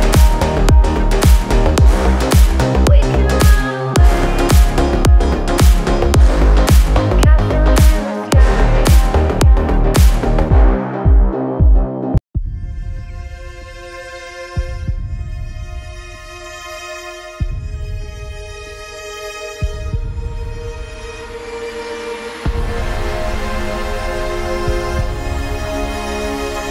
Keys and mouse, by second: 0.3 a, 0.6 Tab, 1.3 right click, 1.4 e, 3.0 s, 3.4 z, 4.1 a, 4.5 e, 5.7 g, 8.6 a, 9.1 Tab, 10.0 a, 11.5 Tab, 13.9 a, 14.1 Tab, 14.3 Tab, 14.5 a, 15.1 ctrl+r, 15.5 a, 16.4 a, 16.5 Tab, 16.9 Tab, 17.8 Tab, 17.8 a, 18.3 ctrl+z, 19.3 a, 20.7 e, 23.6 ctrl+z, 24.0 a, 24.3 l, 24.5 h, 24.7 click, 26.1-26.7 typing, 26.3 alt+h, 26.5 click.